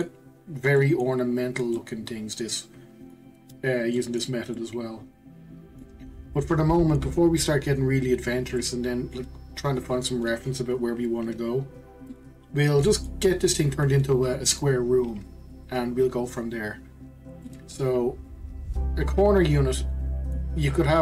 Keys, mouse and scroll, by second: 0.3-0.8 scroll up 2, 0.8-6.0 middle drag, 6.0-6.4 scroll down 2, 6.4-11.7 middle drag, 12.1-15.2 middle drag, 17.4-20.4 middle drag.